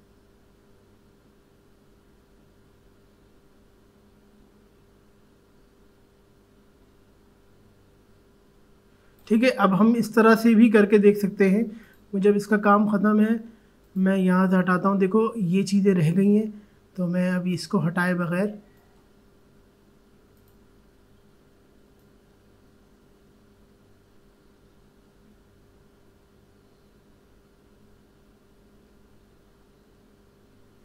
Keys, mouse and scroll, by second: 11.8 click, 16.9-30.8 drag.